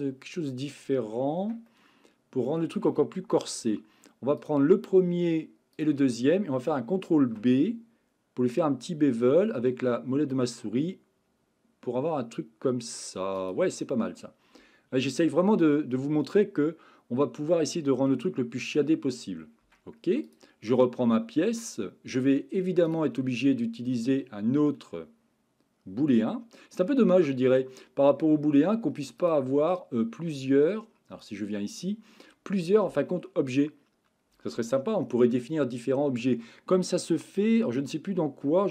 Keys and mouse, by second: 1.4 Tab, 1.7 middle click, 3.4 middle click, 7.2 ctrl+b, 13.9-15.2 middle drag, 15.9-17.7 middle drag, 18.2 shift+middle click, 19.7 Tab, 23.0-27.0 drag, 29.2-30.4 drag, 31.2 click.